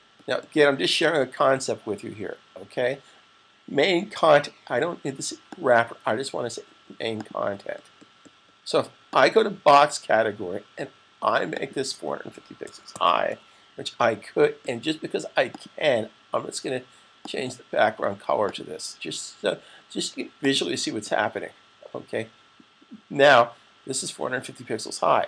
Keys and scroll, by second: 12.3-13.6 typing, 15.1-15.9 typing.